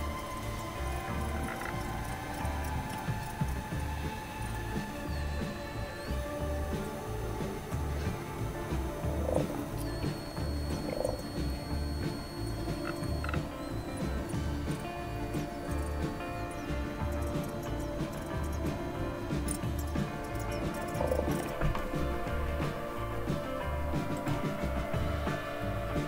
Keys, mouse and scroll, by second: 10.5 click, 24.1 click.